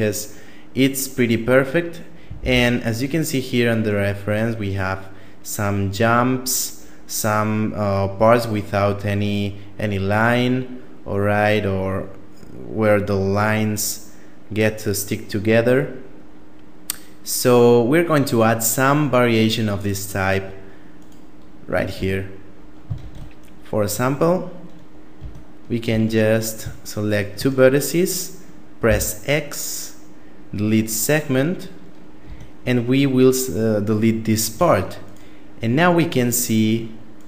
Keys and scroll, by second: 2.3 shift+space, 21.7 Tab, 22.8 ctrl+Tab, 24.9 Tab, 25.7 Tab, 28.7 x, 32.0 Tab, 34.3 Tab.